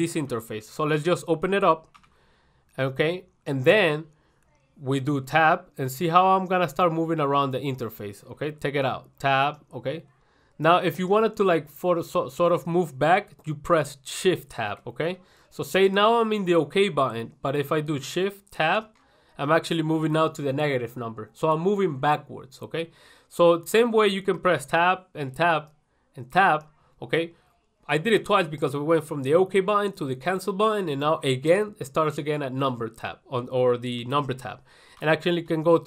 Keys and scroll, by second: 0.6 ctrl+1.